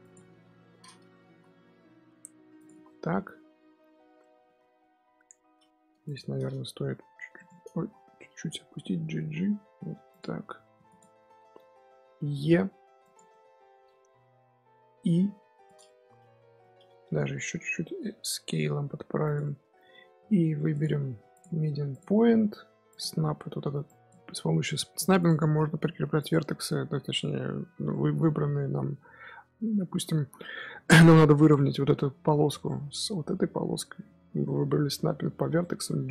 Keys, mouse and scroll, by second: 0.3 KP_7, 1.2 z, 1.8 s, 2.6 z, 2.8-5.7 middle drag, 5.7 2, 6.0 alt+click, 6.8 h, 7.0 h, 7.3-7.7 right drag, 7.7 ctrl+z, 8.5 g, 10.4 2, 10.8 alt+click, 11.3 shift+middle click, 12.2 e, 13.2-14.7 middle drag, 14.7 i, 15.8-17.5 middle drag, 17.5 s, 19.3 middle click, 19.8-20.6 scroll up 1, 20.6-22.9 drag, 23.8 click, 25.1-27.8 drag, 27.8-31.4 middle drag, 32.1-33.0 scroll up 1, 33.0-36.1 middle drag.